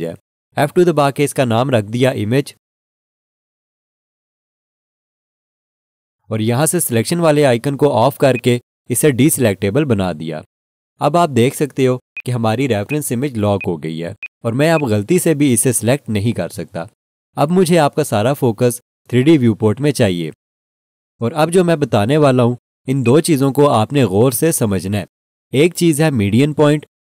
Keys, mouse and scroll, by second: 0.9 F2, 1.4-3.1 typing, 3.7 Return, 8.3 click, 12.1 click, 23.0 alt+shift+click.